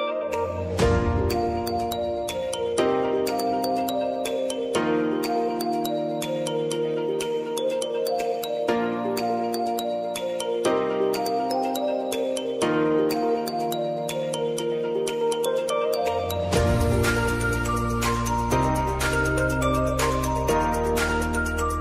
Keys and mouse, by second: 12.6 space, 14.4 click, 15.1 space, 16.7 click.